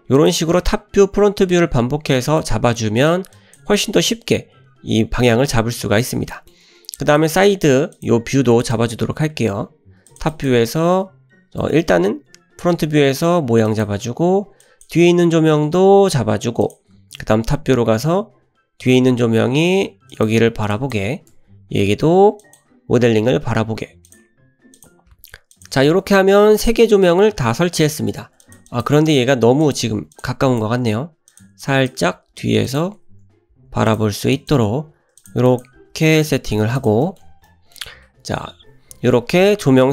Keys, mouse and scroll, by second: 0.7 `, 2.3 shift+middle drag, 3.0 click, 3.4 drag, 6.0 drag, 6.4 shift+middle click, 7.0 drag, 8.0 click, 8.6 click, 9.3 `, 10.1 click, 10.3 click, 11.7 shift+middle click, 12.0 `, 12.9 r, 14.6 drag, 15.6 r, 17.0 `, 19.1 r, 20.7 drag, 21.3 r, 22.9 `, 23.7 r, 24.7 click, 25.1 r, 25.7 `, 26.6 shift+middle click, 27.9 shift+middle drag, 28.4 click, 28.7 click, 29.2 g, 30.0 ctrl+z, 30.2 drag, 30.5 click, 30.9 g, 31.6-31.9 drag, 32.2 g, 33.1 `, 33.6 r, 34.4 click, 34.8 r, 35.5 click, 35.8 g, 36.8 click, 37.0 shift+middle click, 37.5-37.8 middle drag, 37.9 scroll down 1, 38.1 `, 38.7 shift+middle drag, 39.4 drag, 39.8 g.